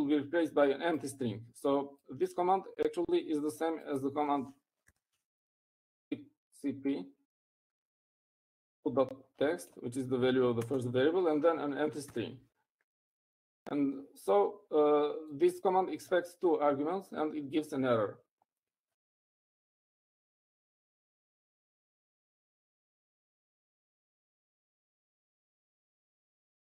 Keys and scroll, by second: 6.2-7.2 typing, 9.2 typing, 12.2 typing.